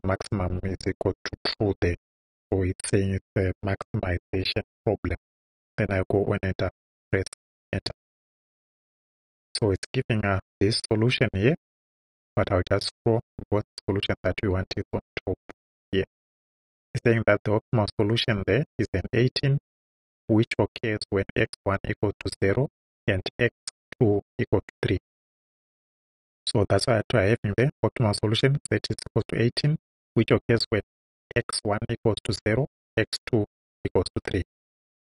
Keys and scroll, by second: 2.0 Right, 8.2 Return.